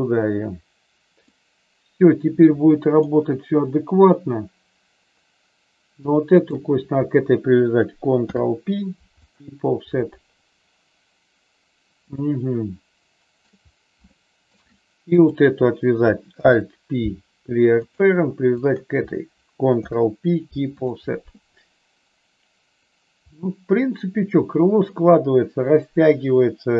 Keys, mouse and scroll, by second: 1.2-3.1 middle drag, 6.3 shift+click, 8.2 ctrl+p, 12.2-13.4 shift+middle drag, 14.0 shift+middle click, 15.1 click, 16.3 alt+p, 18.4 shift+click, 19.7 ctrl+p, 23.2-24.8 middle drag.